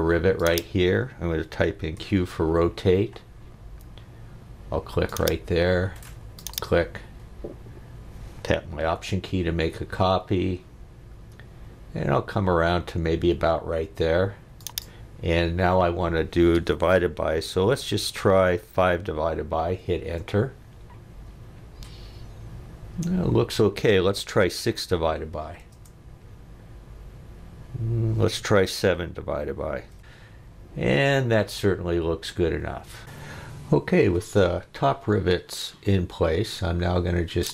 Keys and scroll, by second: 2.0 q, 18.8 5, 19.4 /, 20.1 Return, 24.5 6, 24.9 /, 25.7 Return, 28.9 7, 29.9 /.